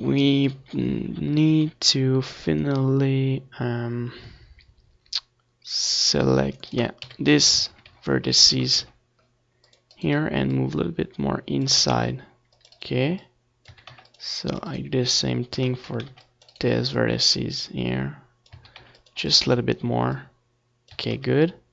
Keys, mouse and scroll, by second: 1.6 click, 2.8 a, 3.1 c, 5.1 a, 5.2 c, 7.4 ctrl+z, 7.7 c, 10.5 a, 10.6 c, 11.6 right click, 12.2-14.0 middle drag, 13.1 a, 13.3 c, 14.0 click, 14.3 right click, 14.8-16.5 middle drag, 16.1 a, 16.5 click, 16.5 c, 17.7 right click, 18.3-19.8 middle drag, 19.8 click, 20.1 a, 20.2 c, 20.9-21.7 right drag, 21.5-21.7 drag.